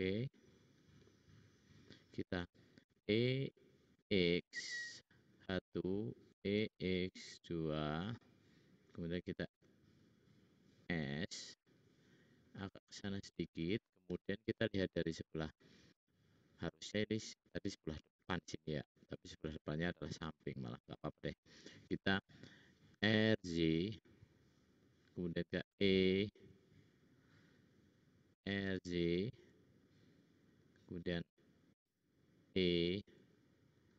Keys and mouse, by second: 3.0 e, 6.4 e, 9.5 s, 11.0 middle click, 12.4 click, 14.0 `, 15.6 `, 22.9 r, 25.9 e, 28.3 r, 31.9 e.